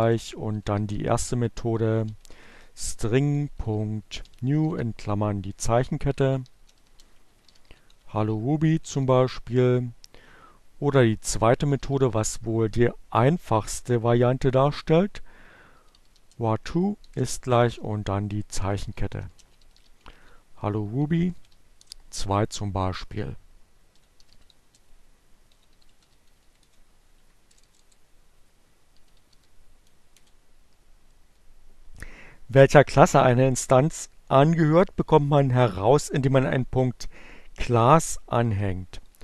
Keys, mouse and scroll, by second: 0.0-4.2 typing, 6.0-8.2 typing, 8.8 shift+Return, 11.2-12.1 typing, 13.9-14.8 typing, 16.4-20.6 typing, 21.6 shift+Return, 21.8-22.7 typing, 23.9-28.1 typing, 26.7 Up, 29.1 o, 29.4 Return, 37.2 Up.